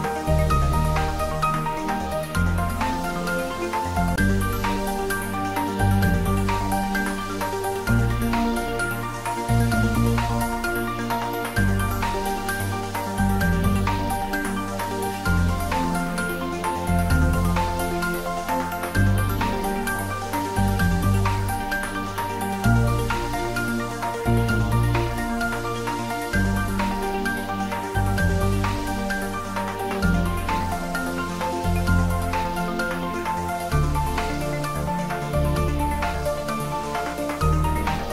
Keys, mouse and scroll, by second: 0.0 click, 0.4 scroll down 1, 0.9-1.8 middle drag, 3.3 click, 4.8 r, 6.1 click, 6.6 g, 7.8 click, 8.2 scroll down 1, 8.6-9.5 middle drag, 10.0-10.5 middle click, 11.1-11.8 click, 12.2 g, 12.6 z, 14.6 click, 15.2 shift+a, 16.7 click, 17.3 scroll up 1, 18.5 s, 20.6 click, 22.3 scroll down 1, 24.1 click, 24.6 scroll down 1, 25.8 s, 27.3 click, 27.7-28.1 scroll up 1, 30.0 g, 30.3 z, 37.0 click, 37.4 scroll down 1.